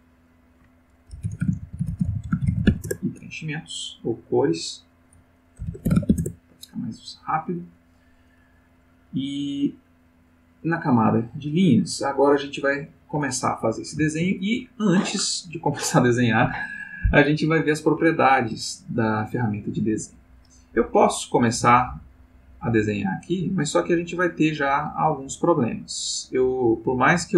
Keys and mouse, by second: 0.0 click, 1.2-2.6 typing, 2.8 shift+Return, 4.5 click, 5.6 shift+c, 5.8 shift+o, 6.0 shift+e, 6.0 shift+s, 6.2 shift+Return, 10.9 click, 11.8 click, 12.8 click, 21.5-27.3 drag.